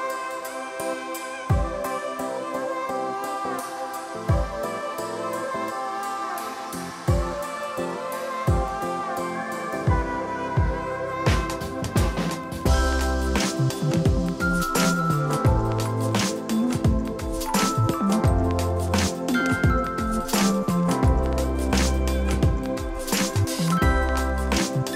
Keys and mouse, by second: 0.2 Delete, 1.5 click, 2.7 click, 5.3 click, 5.7 ctrl+shift+x, 6.4 click, 9.4 click, 11.4 click, 13.3 s, 13.8 ctrl+click, 16.2 click, 19.0 click, 21.3 Escape, 21.4 click, 22.9 ctrl+click, 23.5 right click, 23.9 click, 24.8 click.